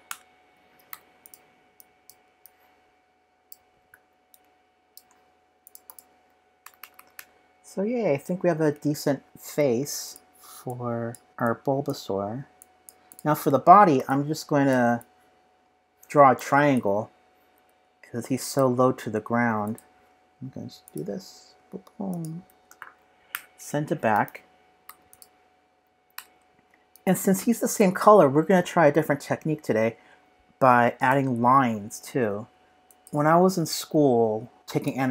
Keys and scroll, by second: 13.5 super+s, 16.7 p, 17.5 p.